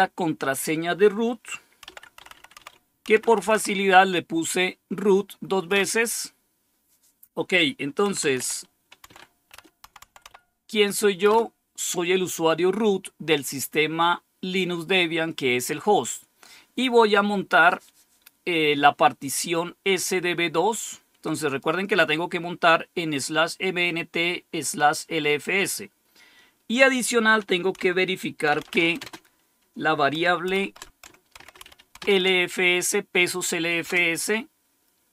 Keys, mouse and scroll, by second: 1.5-3.9 typing, 5.6 Return, 7.7-10.7 typing, 11.2 Return, 21.3 click, 27.7-29.1 typing, 30.4-32.4 typing, 33.8 typing.